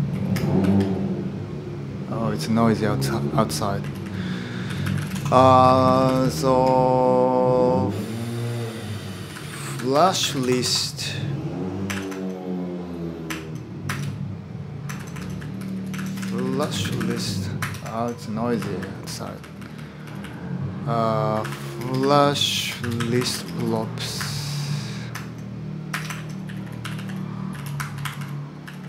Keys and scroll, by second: 0.0-0.4 typing, 3.3-6.5 typing, 8.8-10.8 typing, 11.7 ctrl+l, 13.6 Return, 14.7 ctrl+l, 14.9-24.0 typing, 17.4 Return, 17.7 Escape, 25.7 Return, 25.9 Escape, 26.0-28.8 typing.